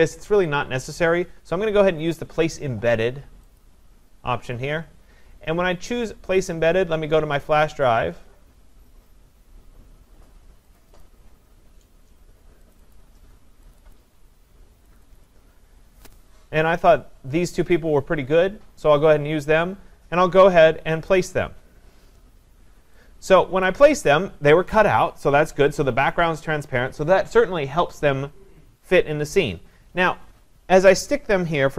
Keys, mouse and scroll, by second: 3.6 click, 7.5 click, 10.8 click, 11.0 click, 12.7 click, 13.0 click, 13.8 click, 13.9 click, 15.0 click, 15.2 click, 16.8 click, 21.1 click, 23.6 click.